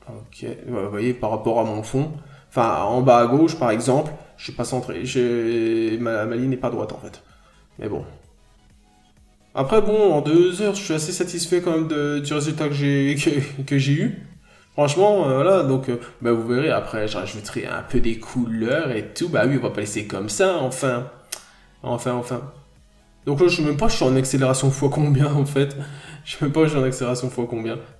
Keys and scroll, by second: 6.7 ctrl+z, 9.1-9.4 scroll down 1, 9.4 n, 9.7-10.0 scroll up 1, 10.2 scroll up 1, 17.9 ctrl+z, 22.5 ctrl+z.